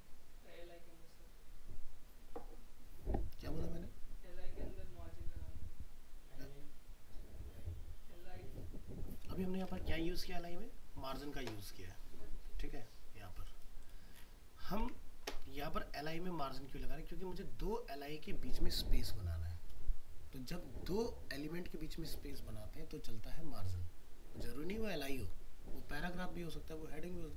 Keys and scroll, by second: 9.7 alt+Tab, 14.8 alt+Tab.